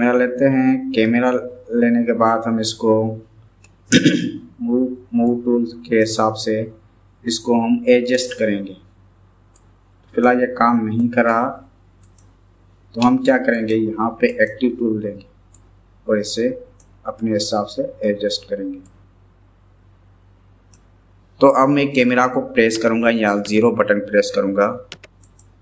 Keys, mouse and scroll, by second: 5.4-6.1 drag, 9.6-10.3 drag, 11.0 click, 13.5-14.9 drag, 15.6 click, 17.3-18.1 middle drag, 19.0 click, 24.3 KP_0, 25.3 click.